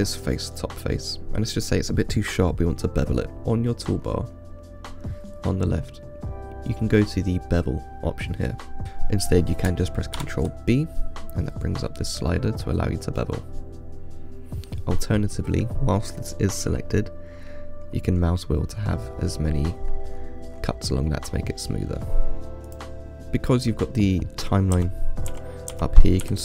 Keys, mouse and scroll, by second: 0.5-1.0 scroll down 2, 1.0-3.3 scroll up 1, 3.3-3.8 scroll up 1, 3.8-4.3 scroll down 2, 4.3-4.6 scroll up 1, 4.6-5.1 scroll down 1, 5.1-8.1 scroll up 1, 10.4 ctrl+b, 25.0 Left, 25.6 Right, 26.0 Left.